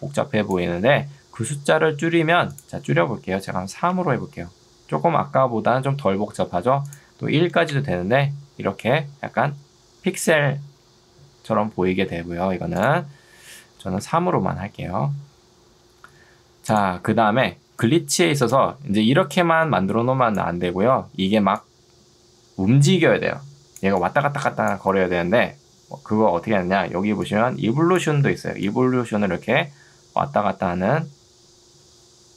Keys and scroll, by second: 1.3 Escape, 3.7 3, 3.9 Return, 7.7 Return, 14.1 Return, 19.1 ctrl+2, 26.9 ctrl+2, 28.3 Escape.